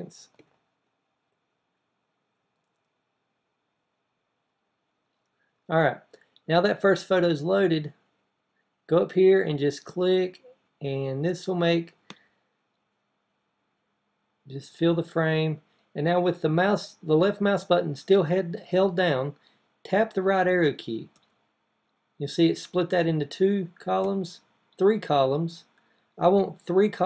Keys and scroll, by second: 20.9 Right, 23.8 Right.